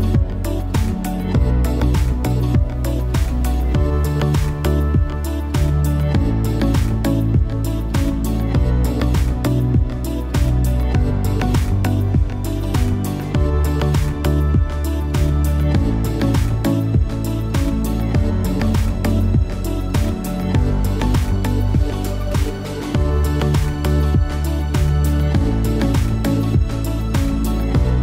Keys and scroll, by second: 8.3 BackSpace.